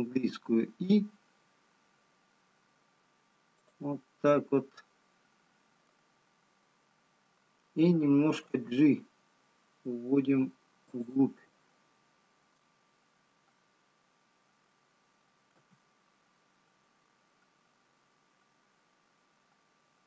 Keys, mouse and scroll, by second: 1.3 i, 4.4 middle click, 6.2 scroll up 1, 8.2 scroll up 2, 10.0 g, 15.1 middle click, 15.1-15.5 scroll down 1, 17.2 g.